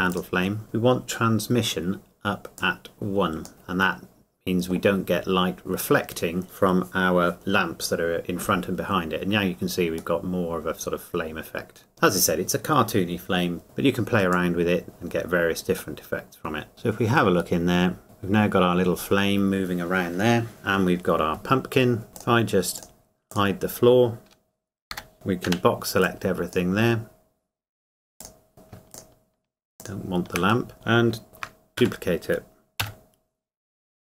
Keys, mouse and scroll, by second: 2.6 click, 3.5 middle click, 5.0 scroll up 1, 9.2-10.2 scroll down 1, 10.2 middle click, 11.9-13.5 scroll down 1, 14.6 click, 15.9 middle click, 16.7 middle click, 17.6 scroll up 1, 18.0 click, 21.6 scroll down 1, 22.1 click, 24.9 h, 25.5 b, 26.3 click, 28.5 middle click, 30.7 middle click, 31.4 shift+d, 31.8 Escape, 33.9 g.